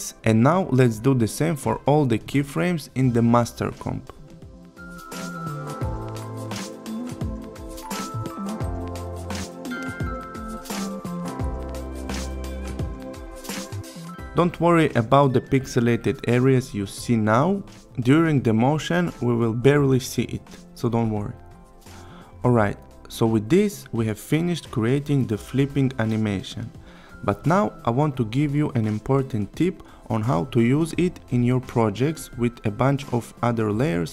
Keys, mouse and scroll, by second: 2.1 click, 5.2 F9, 6.4 click, 18.2 click, 19.0-20.0 click, 22.4 n, 23.0-24.9 click, 26.3 space.